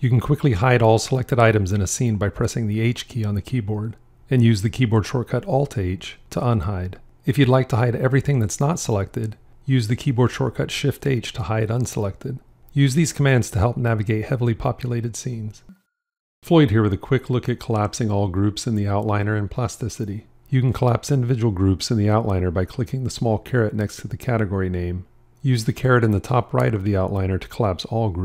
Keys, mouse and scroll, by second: 2.7 h, 5.4 alt+h, 11.0 shift+h, 14.4 alt+h.